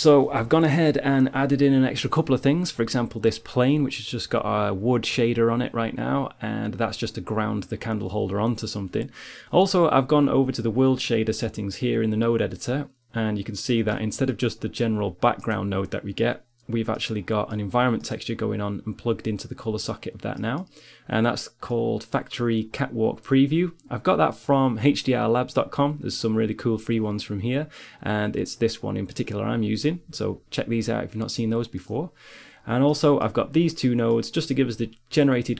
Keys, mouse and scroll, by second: 3.7-9.4 right drag, 13.9-15.6 middle drag, 15.6-17.8 drag, 17.8 middle click, 18.4-20.1 drag, 21.1-23.1 drag, 32.2-33.8 middle drag, 33.8-35.5 drag.